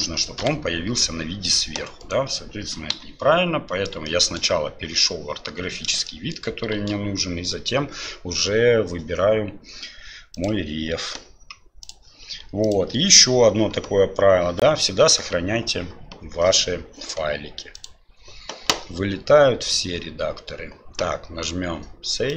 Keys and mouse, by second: 0.4 KP_7, 2.9 Delete, 4.1 shift+click, 6.1-6.4 shift+drag, 6.8 shift+a, 17.7-22.3 drag.